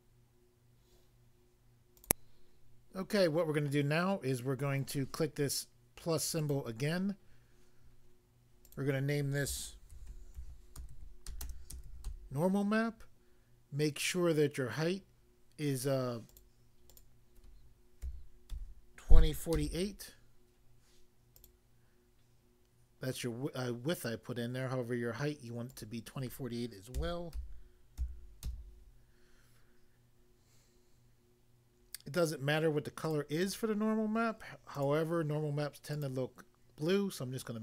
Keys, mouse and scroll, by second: 2.0 click, 2.5 click, 6.5 click, 6.5 click, 8.7 click, 8.8 click, 9.9-12.1 typing, 16.3 click, 18.1-18.6 typing, 19.6 2, 19.6 4, 21.3 click, 25.7 click, 27.0-27.4 typing, 33.1 click, 33.4 click, 33.5 double click, 34.8 double click, 36.0 click.